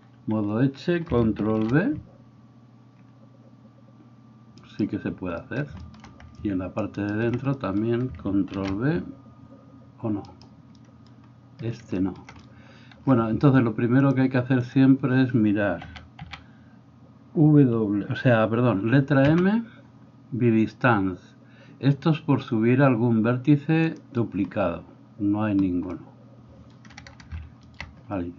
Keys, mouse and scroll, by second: 1.5 ctrl+b, 7.1 alt+middle click, 7.1 alt+right click, 8.5 ctrl+b, 15.9 a, 16.3 a, 19.4 m.